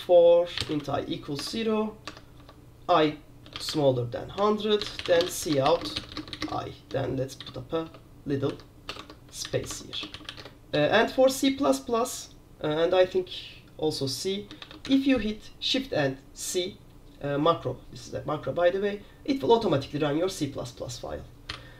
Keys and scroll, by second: 0.4-1.3 typing, 1.5 Tab, 2.2 Tab, 2.5 Tab, 3.3-11.3 typing, 4.5 Tab, 14.5-15.5 typing, 21.6 i.